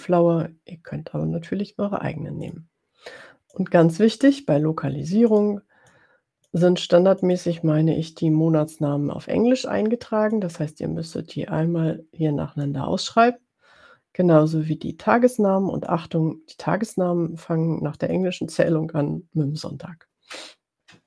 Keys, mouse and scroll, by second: 2.5 click, 3.5 click, 5.3 click, 6.2 click, 7.2 click, 10.4-12.9 drag, 15.9 click, 18.0 click, 18.6 click.